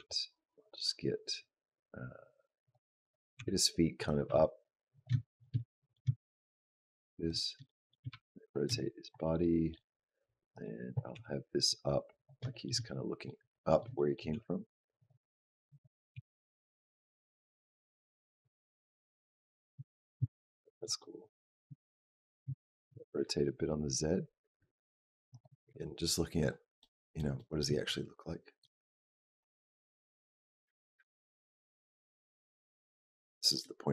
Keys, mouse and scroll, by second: 2.8 click, 3.2 g, 4.1 r, 5.0 shift+middle click, 5.3 scroll down 1, 5.4 middle click, 6.0 shift+middle click, 6.4 shift+middle click, 7.0 click, 7.5 shift+middle click, 7.9 r, 9.2 middle click, 9.7 scroll down 2, 10.3 click, 11.0 g, 12.3 shift+middle click, 13.3 middle click, 14.0 shift+middle click, 14.2 g, 15.5 click, 16.0 g, 18.3 middle click, 19.7 shift+middle click, 20.4 middle click, 20.8 middle click, 21.6 shift+middle click, 22.0 click, 22.4 shift+middle click, 22.7 r, 26.6 middle click, 27.2 middle click, 28.5 click, 33.1 shift+middle click.